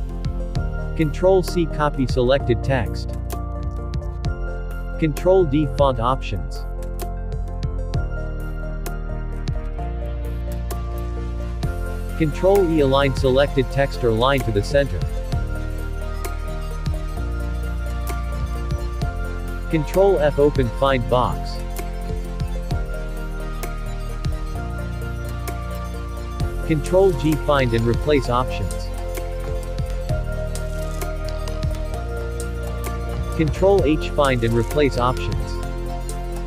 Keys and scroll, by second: 0.9 ctrl+c, 9.0 ctrl+d, 16.1 ctrl+e, 23.6 ctrl+f.